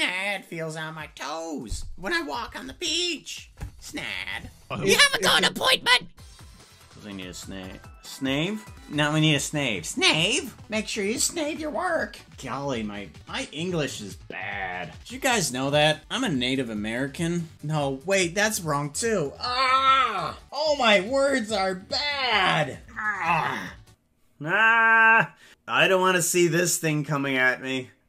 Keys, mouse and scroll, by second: 7.7 ctrl+s, 24.0 click.